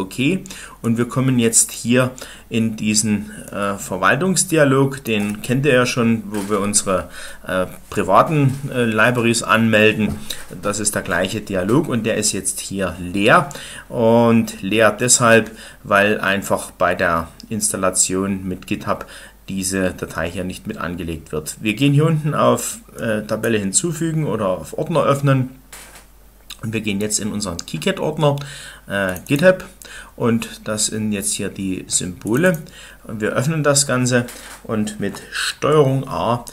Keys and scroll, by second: 35.4 ctrl+a.